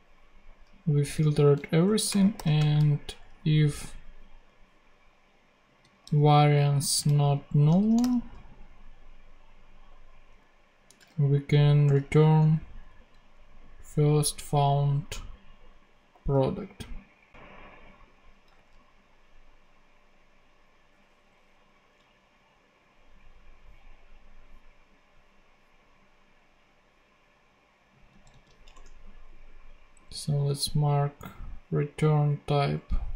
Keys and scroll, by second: 1.0 Return, 1.6-2.9 typing, 6.0 super+c, 7.0 super+v, 7.6 shift+super+v, 7.7 shift+super+/, 7.9 shift+., 11.0 [, 11.8 0, 12.1 super+Right, 18.5 ctrl+Tab, 28.2 super+c, 28.7 ctrl+super+Tab, 29.5 ctrl+Tab.